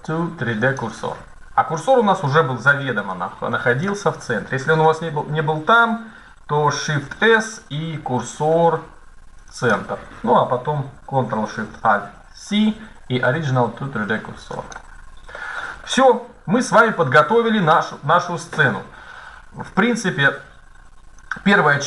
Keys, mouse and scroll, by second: 2.9-6.2 middle drag, 4.5 KP_1, 7.0 shift+s, 15.2-17.6 middle drag, 20.9-21.8 drag.